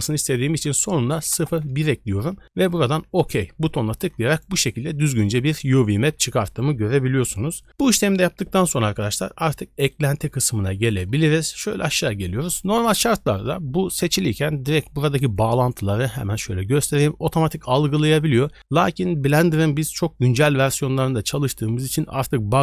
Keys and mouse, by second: 4.5 click, 9.9-10.9 drag, 15.4 click, 16.2 click.